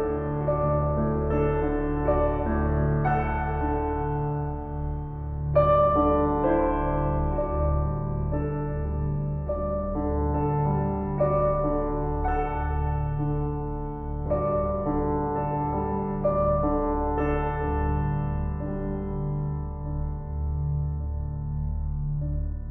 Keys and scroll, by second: 5.2 shift+s, 7.2 s, 9.3 s, 10.9 shift+s, 14.9 s, 16.1 s, 17.1 s, 18.9 s.